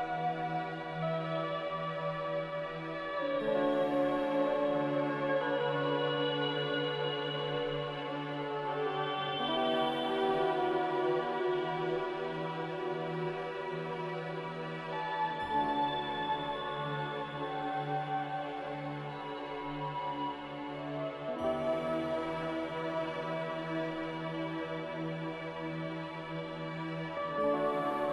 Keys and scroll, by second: 5.5 Delete, 12.2 Delete, 12.8 s, 16.0 z, 18.8 m, 22.2 b, 24.9 z, 26.0 Delete, 27.0 a.